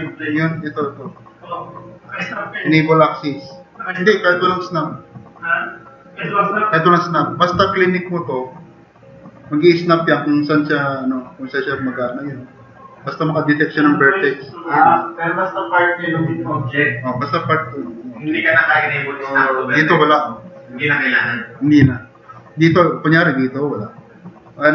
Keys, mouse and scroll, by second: 15.2 click, 21.8-22.4 scroll up 2.